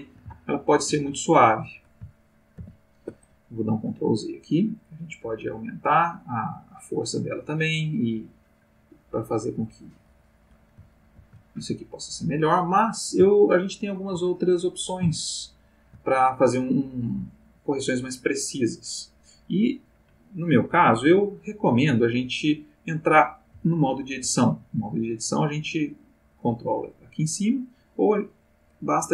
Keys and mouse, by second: 2.5 ctrl+z, 5.3 click, 7.3 click, 8.3-10.7 drag, 11.0 ctrl+z, 13.5 ctrl+middle click, 15.1 shift+middle click, 26.1 click.